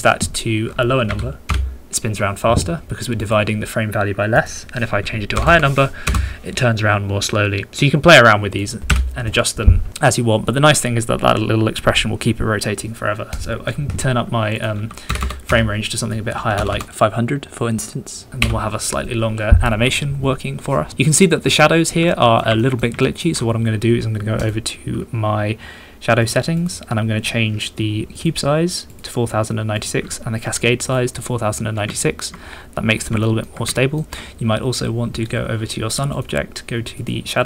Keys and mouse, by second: 3.2-6.1 middle drag, 5.4 KP_0, 8.6 middle click, 13.3 middle click, 14.5 middle click, 15.2 KP_0, 16.0 middle click, 16.7 KP_0, 17.7 Page_Up, 18.4 Home, 22.1 shift+click, 22.2 shift+middle click, 22.6 ctrl+click, 23.0 shift+click, 23.2 shift+middle click, 23.8 middle click, 24.4 middle click, 25.8-26.8 middle drag, 27.8 middle click, 29.8 middle click, 29.8-31.0 drag, 32.0 shift+drag, 32.0 shift+middle drag, 32.4 middle click, 32.6 middle click, 33.0 middle click, 33.2 shift+middle drag, 33.7-35.2 ctrl+middle drag, 35.2 click, 36.1 click, 37.0 click.